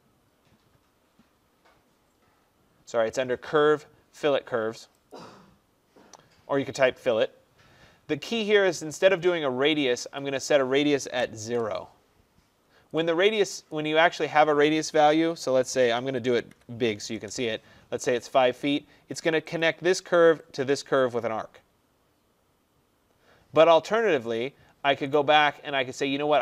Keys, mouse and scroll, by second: 5.2 click, 10.3 click, 11.4 0, 11.5 Return, 13.0 click, 13.8 click, 15.4-17.2 typing, 19.7 click, 20.6 click, 25.2 right click.